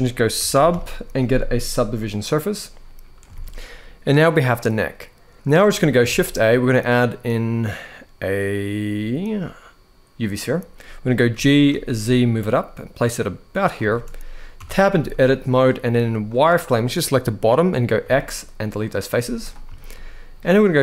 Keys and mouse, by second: 3.1 alt+a, 5.3 click, 5.8 shift+a, 11.0 g, 11.4 z, 13.6 shift+middle click, 14.3 Tab, 14.7 z, 16.0 click, 17.7 x, 18.9 z, 19.5 shift+middle click.